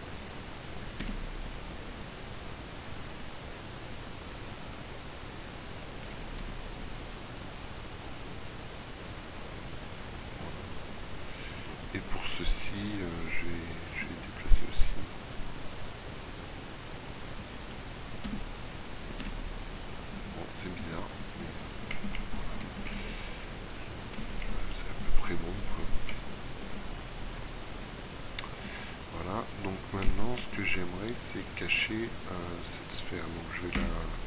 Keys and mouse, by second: 1.0 g, 6.4 g, 10.8-13.1 middle drag, 13.1 g, 18.3 g, 19.3 Tab, 26.9 middle click, 31.4-34.2 drag, 33.7 m.